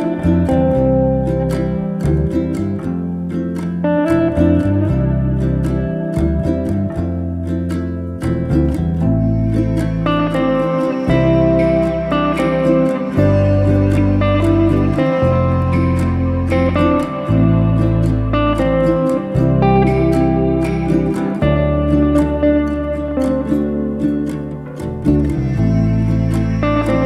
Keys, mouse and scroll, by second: 0.6 r, 1.9 z, 2.0 z, 2.2 middle click, 2.9 s, 4.1-5.6 middle drag, 5.9 scroll down 2, 6.2-7.2 middle drag, 7.2 KP_1, 7.6-8.4 scroll up 2, 8.4 alt+d, 10.1 r, 11.3 z, 11.5-12.3 middle drag, 12.3 s, 14.3-15.3 middle drag, 15.3 KP_1, 15.7-16.2 scroll up 1, 16.2 alt+d, 18.6 r, 19.9 z, 20.3 s, 22.1-23.9 middle drag, 23.9 KP_1, 24.4-24.8 scroll up 1, 24.8 scroll down 1, 25.0 shift+middle click, 25.5 alt+d.